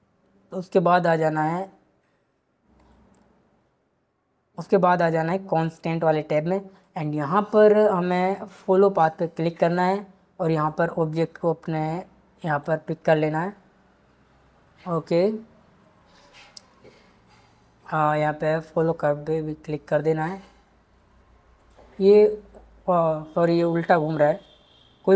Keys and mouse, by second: 2.8 click, 6.8-8.7 drag, 10.5 click, 12.4 click, 18.5 click, 20.3-21.6 drag.